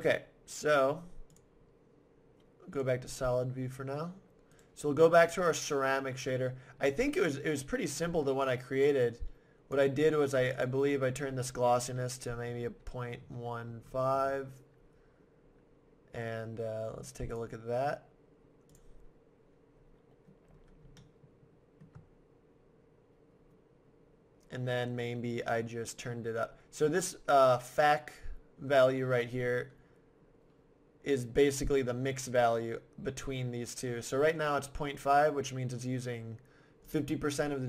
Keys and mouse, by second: 1.3-3.1 drag, 3.5-4.6 middle drag, 4.6-6.2 right drag, 6.2 middle click, 8.6 middle click, 9.0-12.3 drag, 17.3 click, 18.9 click, 19.8-22.7 middle drag, 36.8-37.6 drag.